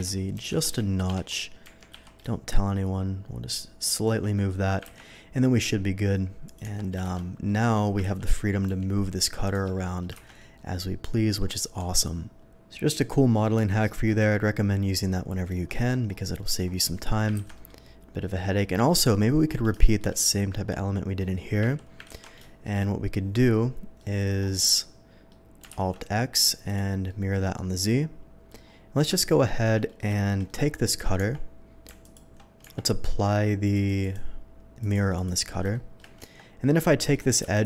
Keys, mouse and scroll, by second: 0.5 z, 1.1 Escape, 1.6 g, 1.9 z, 3.8 click, 4.3 shift+middle click, 4.9 ctrl+b, 5.6-6.4 scroll up 1, 6.4 click, 6.7 Tab, 7.1 Tab, 7.1 shift+2, 7.4 middle click, 8.0 ctrl+z, 8.6 g, 9.5 Escape, 9.7 ctrl+z, 9.8 middle click, 10.5-11.4 shift+middle drag, 12.2-13.3 middle drag, 13.8 middle drag, 15.0-15.4 middle drag, 15.7 middle drag, 16.4 middle drag, 17.5 ctrl+s, 17.5 middle drag, 18.2 middle drag, 18.5 middle click, 18.8 middle drag, 19.7 shift+middle drag, 21.2 shift+middle drag, 22.0 ctrl+z, 22.4 shift+middle drag, 22.7 ctrl+shift+z, 23.4-23.9 middle drag, 24.4-25.3 shift+middle drag, 26.6 click, 27.0-27.5 middle drag, 27.8-28.5 middle drag, 28.5 alt+x, 29.8 shift+middle click, 30.1 shift+middle drag, 30.4 shift+middle click, 31.1 Tab, 32.0 alt+click, 32.6 Tab, 33.7 click, 34.0 click, 34.8 click, 35.1 click, 35.7 middle drag, 36.2 Tab, 37.5 alt+click.